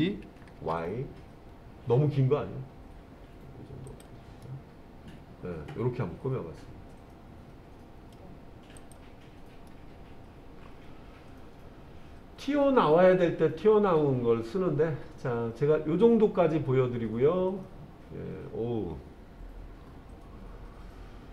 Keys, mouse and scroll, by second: 0.6 y, 3.9 click, 4.5-8.2 middle drag, 8.8 click, 9.7-21.3 middle drag.